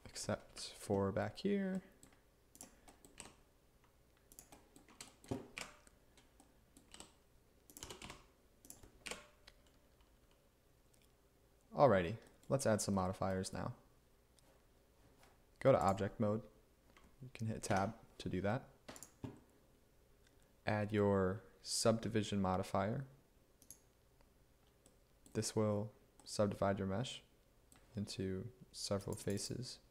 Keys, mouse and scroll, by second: 0.6 1, 3.2 e, 5.6 1, 7.0 e, 7.9 g, 8.1 x, 9.1 1, 17.8 Tab.